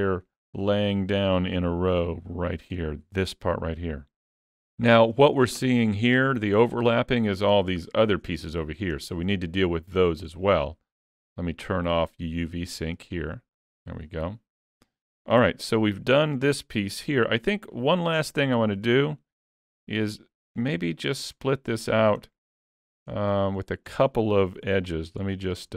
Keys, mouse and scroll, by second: 0.1 middle click, 4.3-4.7 scroll down 2, 4.8 shift+middle click, 5.7-6.4 scroll down 1, 7.6 scroll down 4, 7.9 shift+middle click, 9.5-10.5 scroll up 5, 13.2 click, 14.8 middle click, 15.4 alt+a, 15.9 shift+middle click, 16.0 shift+scroll up 1, 17.5 l, 18.6-19.0 scroll up 5, 19.0 shift+middle click, 20.0 scroll up 2, 20.3 shift+middle click, 21.0-21.5 scroll up 1, 21.5 middle click, 21.5 scroll up 1, 22.3 middle click, 22.8 shift+middle click, 23.3-24.0 scroll up 2, 23.7 middle click, 24.6 2, 24.8 middle click, 25.2 shift+middle click.